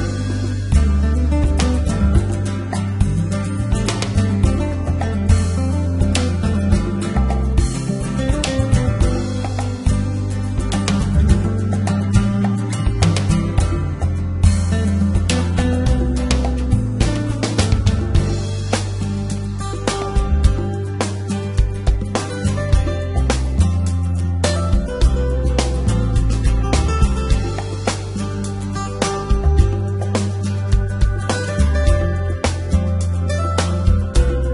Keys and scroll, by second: 1.9 g, 2.0 x, 8.9 Escape, 12.7 g, 13.2 z, 15.3 g, 15.4 x, 17.4 Tab, 20.8 x, 23.1 g, 23.2 x, 25.4 Tab, 31.0 x, 31.3 y.